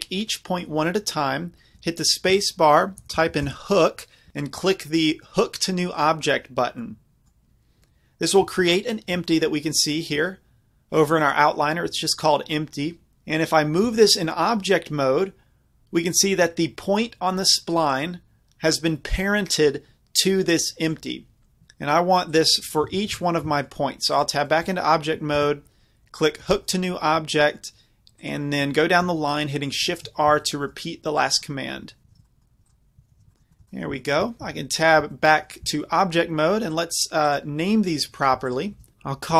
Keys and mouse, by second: 1.5-3.3 middle drag, 1.8 space, 3.3 o, 6.8-11.2 middle drag, 8.5 z, 11.2 click, 12.0 middle click, 12.1-13.9 drag, 13.9 g, 20.9-21.7 right drag, 22.3-22.8 middle drag, 22.8-26.3 drag, 22.9 Tab, 25.4 space, 28.2-32.1 drag, 29.9 shift+r, 32.1 shift+r, 32.4 right click, 33.1 shift+r, 34.5 Tab, 36.7-38.9 drag.